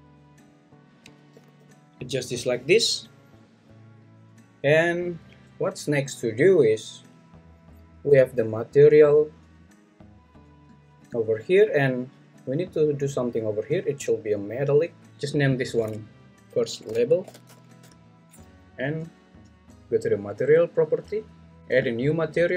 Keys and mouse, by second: 0.5 click, 1.3 g, 1.6 y, 15.5-17.8 drag, 21.8 click.